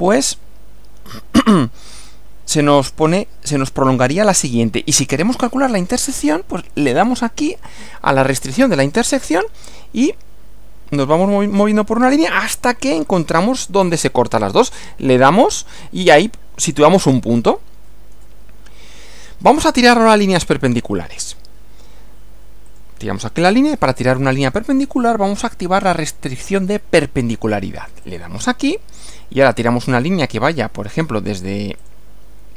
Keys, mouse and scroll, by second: 6.8 click, 15.1 click, 17.1-17.5 scroll down 1, 18.3-19.5 shift+middle drag, 20.0-20.6 scroll up 4, 22.7 click, 28.1 click, 31.8 click.